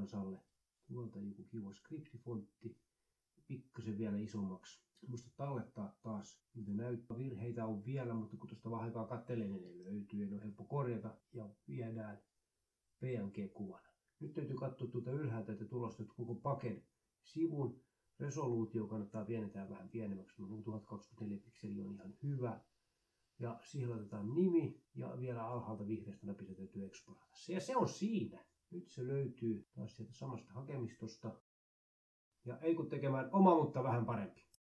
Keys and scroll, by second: 1.1 a, 2.2 ctrl+a, 19.2-20.4 typing, 23.6-26.3 typing.